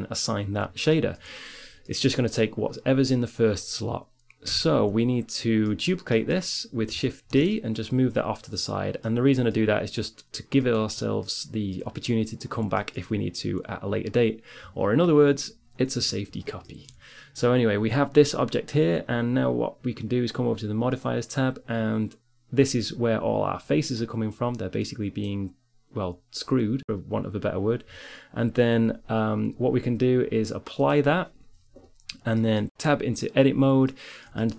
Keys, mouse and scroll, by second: 0.0 middle click, 1.4-3.9 middle drag, 4.4 Tab, 4.9 middle click, 7.0 shift+d, 10.9-13.0 drag, 18.7-20.3 middle drag, 20.3-22.6 drag, 22.6-23.8 middle drag, 23.8-26.9 drag, 26.9-29.4 middle drag, 30.2-32.4 drag, 32.6 Tab.